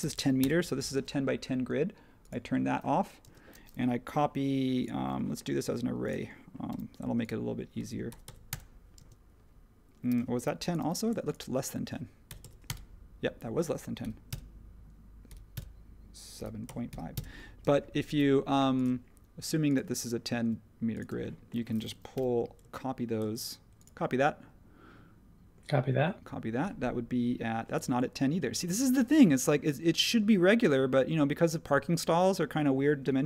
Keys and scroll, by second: 0.1-0.9 typing, 3.2 space, 8.0-8.7 typing, 10.8 m, 12.3-12.6 typing, 13.8-17.4 typing, 19.6 typing, 22.1 m.